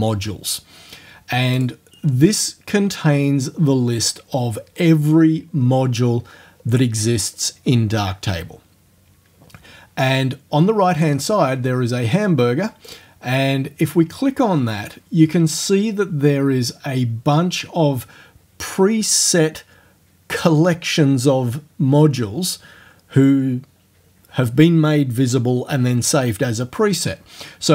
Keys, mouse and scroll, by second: 1.6 click, 2.8-3.2 scroll down 1, 3.4-3.8 scroll down 1, 3.9-5.9 scroll down 6, 6.2-6.7 scroll down 2, 7.0-7.9 scroll down 2, 12.9 click.